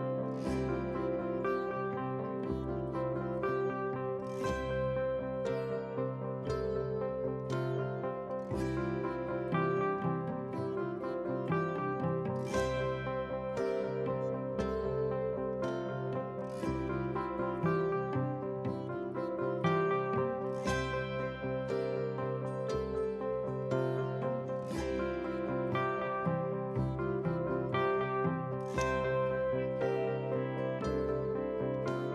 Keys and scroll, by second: 11.6 F8, 13.6 ctrl+space, 22.9 ctrl+a, 23.7 ctrl+space, 24.4 ctrl+a, 27.4 ctrl+space.